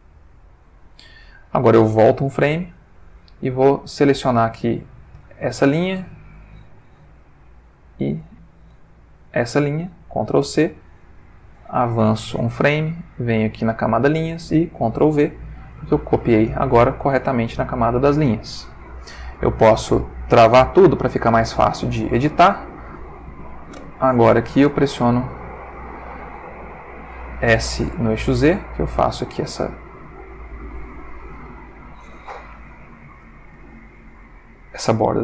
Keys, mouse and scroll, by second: 0.2 click, 2.6 Left, 3.9 click, 5.1 l, 7.6 shift+click, 8.7 l, 10.4 ctrl+c, 12.0 Right, 13.3 click, 15.1 ctrl+v, 17.2-18.2 ctrl+middle drag, 19.8 click, 20.8 click, 22.4 click, 23.8 l, 24.7 r, 25.7 click, 26.7 s, 27.5 z, 28.7 click, 28.9 g, 30.2 click, 30.5 s, 31.8 click.